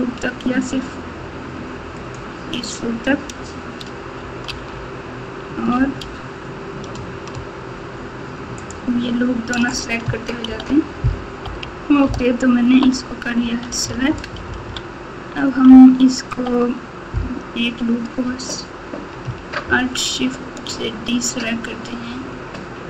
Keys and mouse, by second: 2.0 alt+shift+click, 4.4 alt+z, 5.7 alt+z, 8.5 alt+shift+click, 10.4 ctrl+z, 12.0-12.7 ctrl+KP_8, 15.6 ctrl+KP_8, 16.1 ctrl+KP_8, 16.3 ctrl+KP_8, 16.4 ctrl+KP_8, 16.4 ctrl+KP_8.